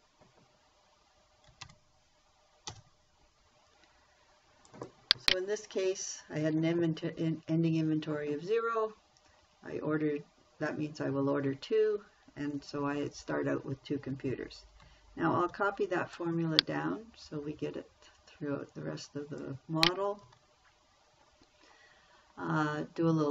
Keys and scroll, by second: 0.0 1, 2.0 shift+0, 3.1 Return, 15.9 ctrl+c, 20.6 ctrl+v.